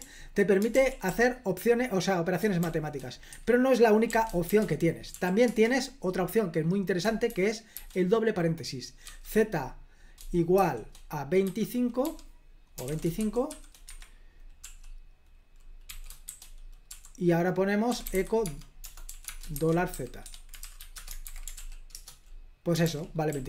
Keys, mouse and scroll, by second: 0.0 k, 0.7 super+l, 1.1 k, 2.6 shift+d, 3.4 Escape, 4.1 d, 4.5 shift+g, 5.2 o, 5.5 Return, 7.1-9.1 typing, 10.6-14.7 typing, 15.9-21.1 typing, 21.3 super+h, 21.6 ctrl+p, 21.9 Return, 22.9 super+l, 23.3-23.4 typing.